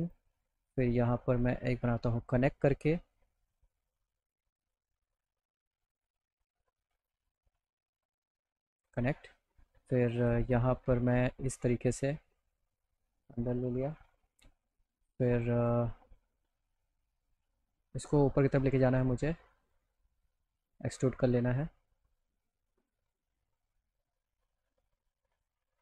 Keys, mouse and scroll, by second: 0.0 right click, 1.4 right click, 6.4 click, 6.6 middle click, 6.9 right click, 8.8 click, 10.2 click, 11.1-12.1 drag, 12.4 middle click, 12.4 scroll, 16.1 click, 18.5 click, 19.6 click, 20.0 middle click, 20.6 right click, 21.5 click, 22.2 click, 23.2 scroll up 1, 24.3 alt+middle click.